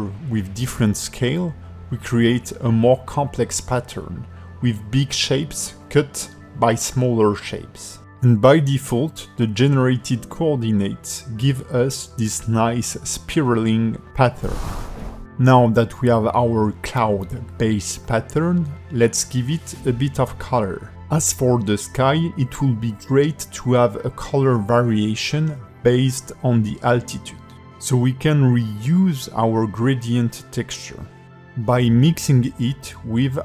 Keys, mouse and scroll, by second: 0.8 click, 2.3 scroll down 2, 2.7 middle click, 6.8 h, 7.2 scroll down 4, 7.6 alt+middle click, 10.7 ctrl+space, 11.1 middle click, 15.0 alt+h, 17.8 click, 18.4 click, 20.1 g, 21.5 click, 21.9 g, 23.2-23.5 scroll down 3, 23.6 alt+middle click, 25.3 click, 27.4 click, 28.5 click, 30.8 ctrl+shift+click, 33.3 shift+a.